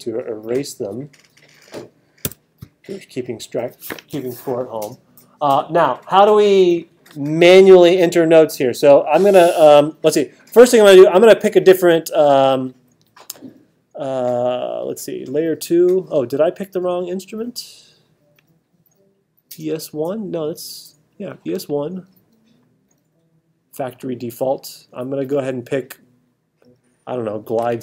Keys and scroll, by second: 2.2 t.